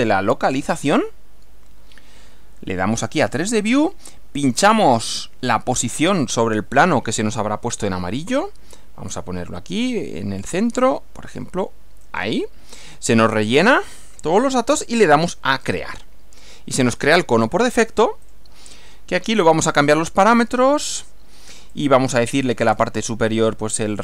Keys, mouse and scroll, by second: 0.7 click, 3.2 click, 12.0 click, 15.6 click, 18.2 click, 19.4 click, 21.7 click, 22.3-23.0 scroll down 2.